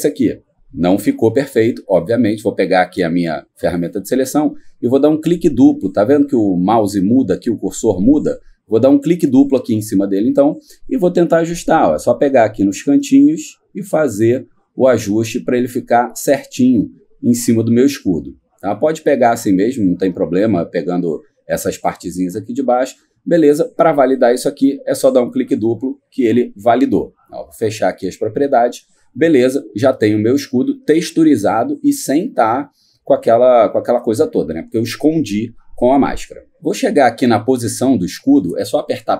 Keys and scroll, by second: 39.0 p.